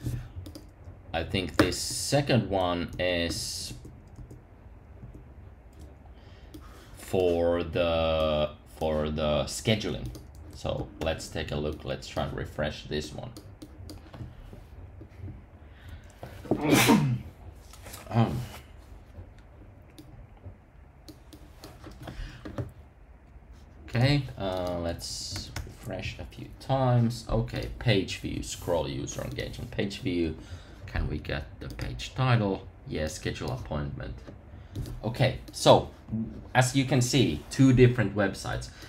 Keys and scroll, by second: 2.9 super+§, 11.0 super+r, 25.0 super+r.